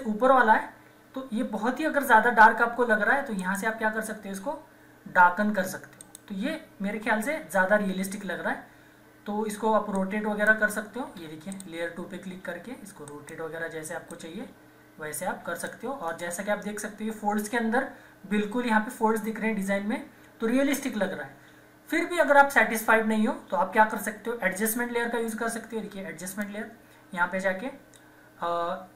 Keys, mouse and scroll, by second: 3.4 click, 6.0 click, 7.1 typing, 9.9 click, 10.1 click, 11.2 Escape, 11.5-16.1 drag, 16.1 Return, 18.4 typing, 26.3 click, 26.3 typing.